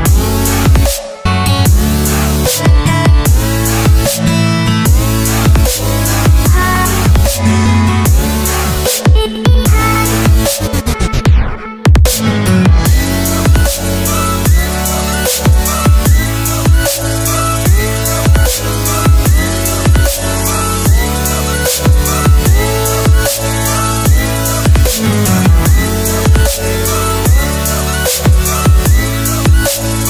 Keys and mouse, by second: 0.3 click, 2.3 click, 3.6 click, 4.9 click, 9.4 click, 10.5-11.3 middle drag, 11.9 middle click, 12.4-13.0 shift+middle drag, 13.4-15.6 middle drag, 18.6 click, 19.7 click, 21.4 click, 21.7 typing, 21.9-23.4 right drag, 25.0 r, 28.5 shift+click, 29.5 right click.